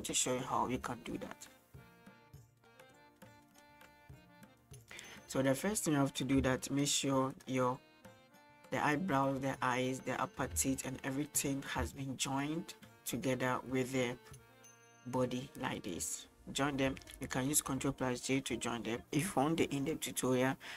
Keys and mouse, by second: 2.6 shift+middle click, 3.5 shift+middle click, 5.6 right click, 6.4 g, 10.6 g, 11.9 g, 16.1 g.